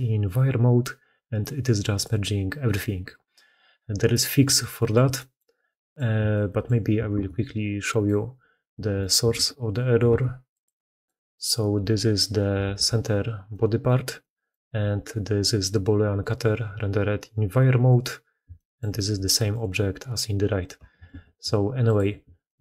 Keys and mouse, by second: 4.7 shift+middle click, 5.2-5.7 middle drag, 5.8 shift+middle click, 6.8-8.9 ctrl+middle drag, 6.9 ctrl+x, 9.1 ctrl+x, 10.1 ctrl+x, 10.8 middle click, 12.4 KP_Decimal, 12.6 KP_3, 13.3-13.8 middle drag, 14.0-14.3 middle drag, 14.6 g, 18.4 shift+middle drag, 19.0 g, 20.9 ctrl+x, 22.3 shift+middle drag.